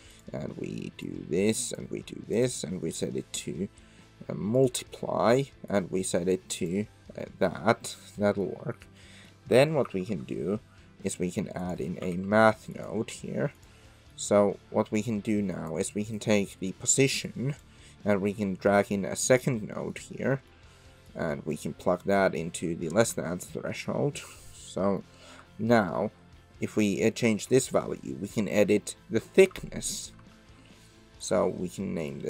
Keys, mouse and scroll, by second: 1.0-1.8 drag, 2.3-4.7 drag, 5.7-6.7 drag, 7.3 middle click, 8.1 middle click, 9.1 middle click, 9.8 shift+a, 14.0 middle click, 15.1 click, 16.2-16.9 drag, 17.4 click, 18.4-19.4 drag, 19.8 middle click, 20.4 middle click, 21.1-22.1 drag, 23.1 Tab, 23.7 middle click, 24.8 middle click, 25.8-29.3 shift+drag, 29.9 click, 30.2 Tab, 32.1-32.2 drag.